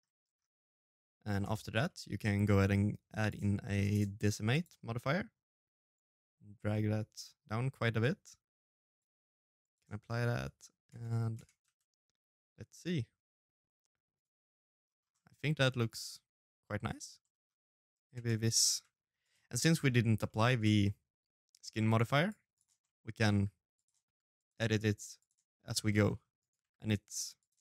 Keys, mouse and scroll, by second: 1.2 middle click, 1.5 scroll down 1, 1.7 scroll up 1, 2.6 scroll up 1, 2.6 Tab, 3.0 middle click, 3.4 shift+middle click, 4.4 click, 5.6 click, 10.8 click, 11.3 middle click, 12.0 Tab, 12.2 middle click, 12.5 Tab, 12.8 z, 13.4 middle click, 15.3 right click, 15.5 middle click, 15.9-16.4 scroll down 5, 16.3 middle click, 16.9-17.3 scroll up 3, 17.1 middle click, 18.6-19.3 scroll up 2, 19.0 right click, 19.3 Tab, 19.5 middle click, 19.8 shift+z, 20.1 scroll up 1, 20.4 right click, 20.8 middle click, 20.9-21.4 scroll down 3, 21.4 middle click, 21.8 scroll up 1, 21.9 middle click, 22.0-22.8 scroll down 1, 22.8-24.0 scroll up 3, 23.2 c, 24.0 middle click, 24.4 g, 25.1 r, 25.7 g, 26.8 middle click, 27.1 shift+z, 27.4 scroll up 1, 27.5 right click.